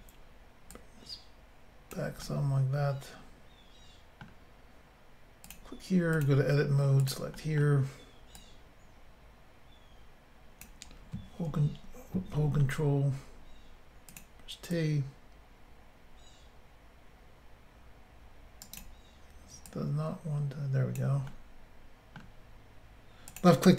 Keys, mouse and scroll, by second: 0.7 click, 2.2 middle click, 5.4 click, 6.2 click, 6.2 click, 7.0 click, 7.1 click, 7.4 middle click, 8.4 click, 11.5 ctrl+r, 12.4 ctrl+t, 14.1 click, 14.2 click, 14.8 click, 18.6 right click, 18.8 right click, 19.7 click, 21.3 middle click, 23.3 click, 23.4 click.